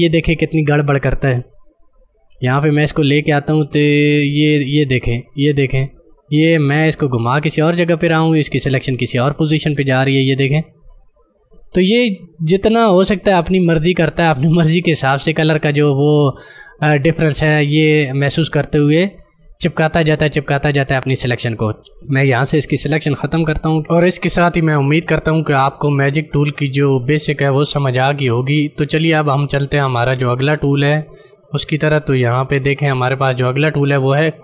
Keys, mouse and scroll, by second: 1.2 ctrl+space, 1.4 ctrl+click, 1.8 ctrl+space, 15.7 click, 15.9 space, 16.1 space, 21.7 Escape.